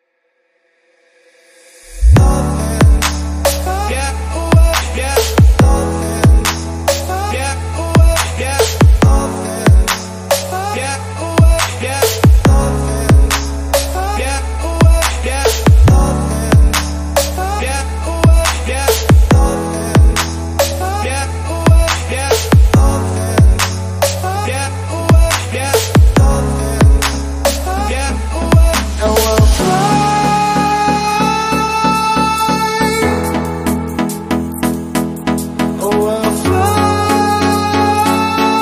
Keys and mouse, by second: 0.3 click, 1.0 click, 1.6 click, 2.8-4.1 shift+middle drag, 4.1-4.8 drag, 5.3 s, 6.5 g, 13.3-14.8 drag, 16.1 click, 17.0 g, 20.5-23.5 middle drag, 26.0-27.4 shift+middle drag, 27.4 r, 28.5 r, 30.1 g, 34.2 g.